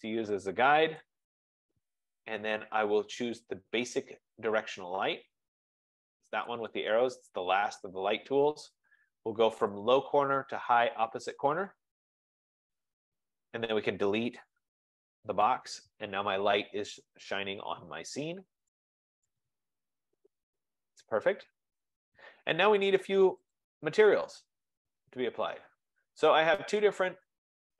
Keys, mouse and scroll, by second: 1.2 click, 6.8-9.6 drag, 11.8 click, 13.3 click, 14.0-15.1 typing, 16.0 Delete, 21.1 right click, 23.8 click.